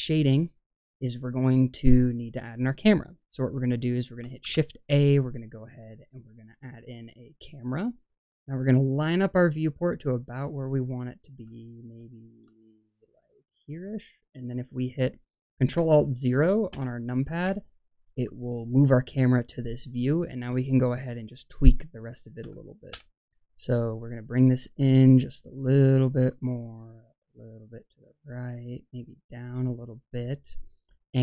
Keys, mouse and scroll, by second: 1.7-2.2 middle drag, 4.3 shift+a, 8.4-11.2 middle drag, 11.9 middle click, 12.5-13.8 shift+middle drag, 13.8 scroll up 1, 14.1 middle click, 16.6 ctrl+alt+KP_0, 21.6-22.8 drag, 24.2-26.2 drag, 26.6-28.2 drag, 29.0-30.3 drag.